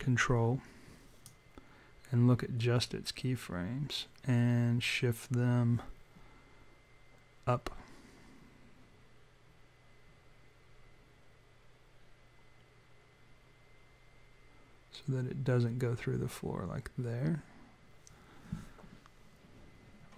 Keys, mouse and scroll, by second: 1.2 click.